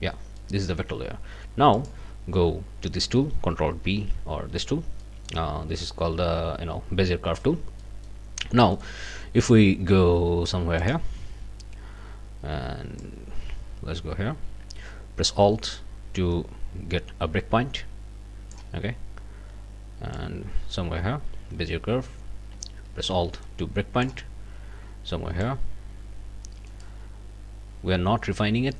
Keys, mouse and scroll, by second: 0.4 middle click, 1.7 click, 3.9 ctrl+alt+b, 5.0 middle click, 7.7 scroll up 2, 7.8 middle click, 7.9 click, 8.0 middle click, 8.4 scroll down 2, 8.7 click, 10.8 click, 13.0-18.7 drag, 20.1-24.2 drag, 25.4-27.0 drag, 26.7 right click.